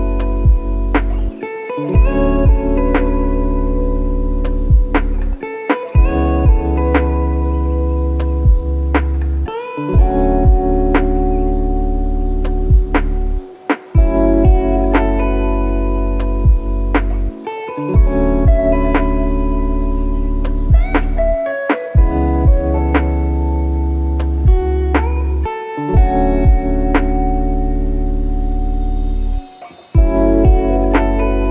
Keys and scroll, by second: 14.0 F1, 24.8 F3, 29.5 F1.